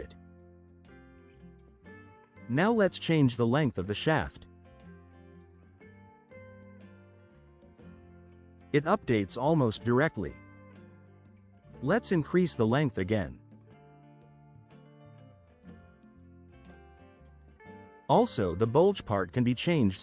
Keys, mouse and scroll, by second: 0.2-0.9 drag, 3.6 click, 4.6 2, 4.9 5, 5.4 Return, 9.1-10.2 drag, 11.4 click, 11.8 2, 12.2 9, 12.5 Return, 16.1-17.2 drag.